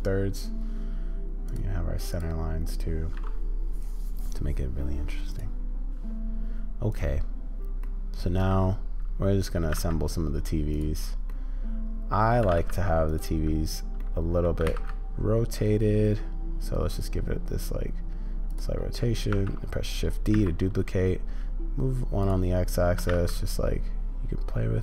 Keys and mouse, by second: 8.1-9.6 middle drag, 9.6 g, 11.6 middle click, 12.4 g, 14.6 r, 18.4 middle click, 19.3 shift+d, 19.6-22.3 middle drag, 23.0 r.